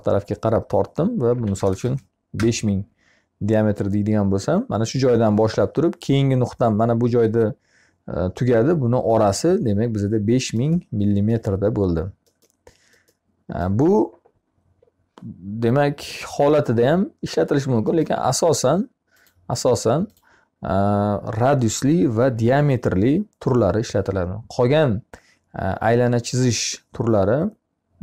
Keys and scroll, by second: 0.7 5, 1.4 0, 2.2 Return.